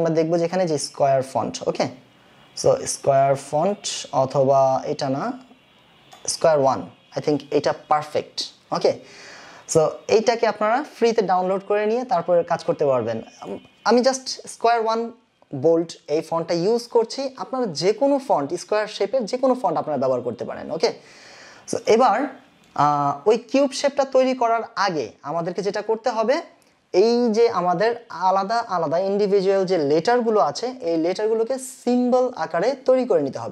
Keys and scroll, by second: 22.6 space.